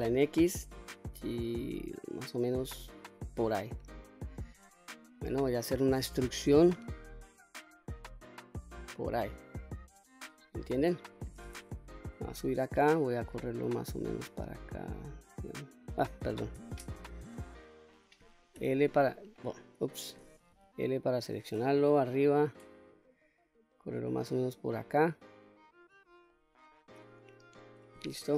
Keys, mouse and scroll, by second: 3.1 click, 3.7 middle click, 4.7 scroll down 1, 5.1 middle click, 6.2 e, 8.5 click, 9.1-10.4 middle drag, 10.5-11.1 scroll down 1, 11.8 KP_7, 13.3-15.8 drag, 16.6 ctrl+z, 16.9 middle click, 18.6 l, 19.6 click, 20.5 l, 21.8 KP_7, 22.9-25.9 drag, 26.3 middle click, 27.3-27.8 scroll up 2, 27.8-28.3 scroll down 1.